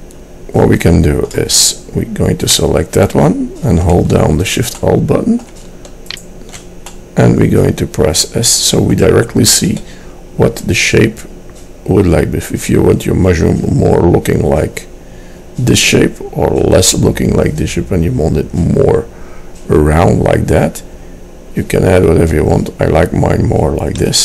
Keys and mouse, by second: 0.9 middle click, 2.6-4.6 drag, 4.9 click, 5.1-6.2 middle drag, 6.2-7.8 drag, 7.8-9.0 middle drag, 9.9 s.